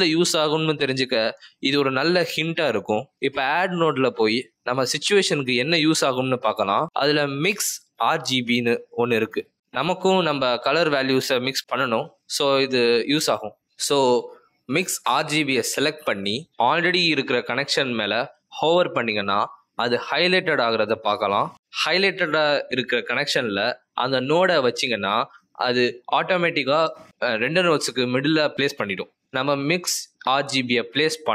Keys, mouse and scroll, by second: 4.2 click.